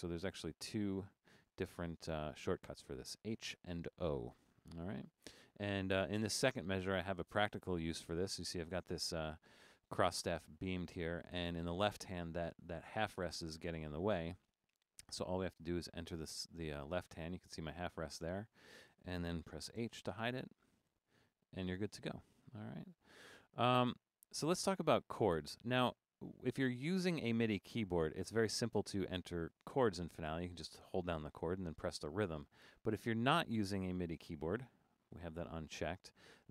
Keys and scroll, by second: 0.9 Left, 1.2 o, 1.5 Left, 2.1 o, 16.8 Right, 17.2 Left, 17.9 Down, 18.1 Down, 19.8 h.